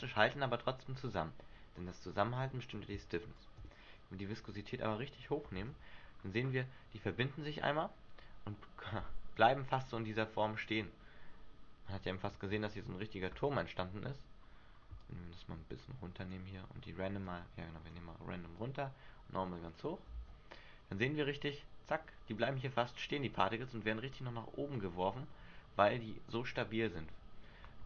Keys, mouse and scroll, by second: 1.7 Escape, 3.5 click, 5.7 alt+a, 6.2 scroll down 1, 7.1 middle click, 7.1 scroll down 1, 13.6 Escape, 15.1 click, 17.4 click, 18.7 click, 20.4 alt+a, 23.5-23.8 scroll down 2.